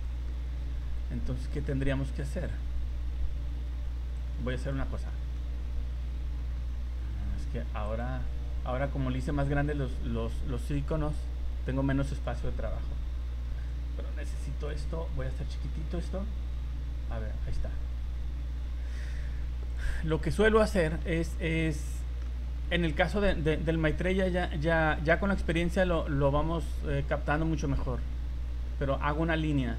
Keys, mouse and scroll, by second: 0.0 right click, 0.3 middle click, 4.1 click, 5.0 shift+middle click, 7.8 click, 9.2 click, 11.1 click, 13.7 click, 15.9 click, 19.9 click, 20.8 click, 21.3 middle click.